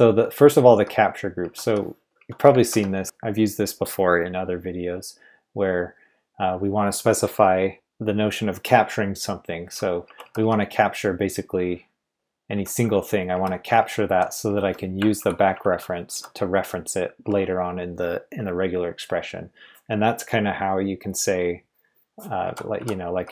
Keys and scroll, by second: 0.0-3.0 typing, 2.6 ctrl+v, 10.0 Escape, 10.2-17.2 typing, 15.1 ctrl+v, 22.2-23.3 typing.